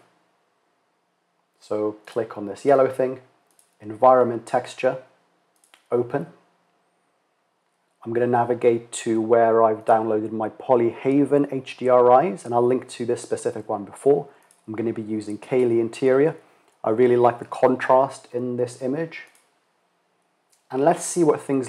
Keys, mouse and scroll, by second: 1.6-3.4 drag, 5.9 drag.